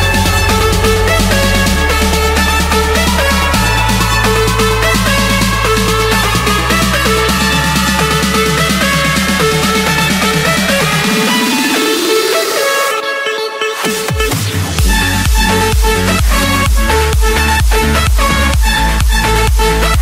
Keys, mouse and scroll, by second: 2.5 click, 2.7 Escape, 4.2 click, 5.1 middle click, 5.7 middle click, 9.9 click, 11.8 click, 12.3 scroll, 12.7 Escape, 15.4-16.2 typing, 18.5 click.